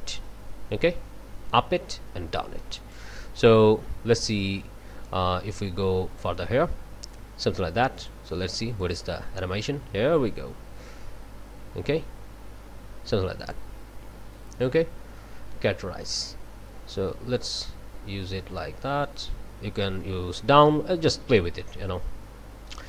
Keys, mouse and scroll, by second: 5.0-6.4 drag, 8.0 click, 8.8 click, 13.4 click, 16.2-22.8 drag.